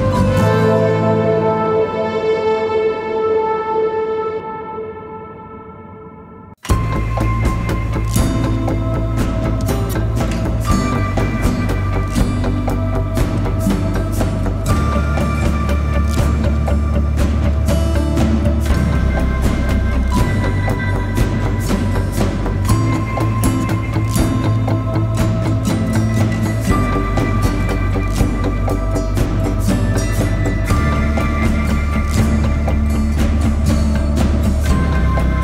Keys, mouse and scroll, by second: 29.2 alt+click, 34.7 right click.